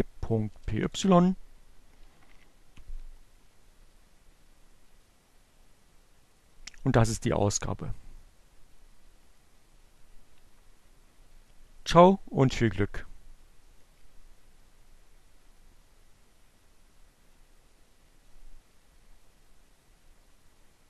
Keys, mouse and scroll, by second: 0.0 Return.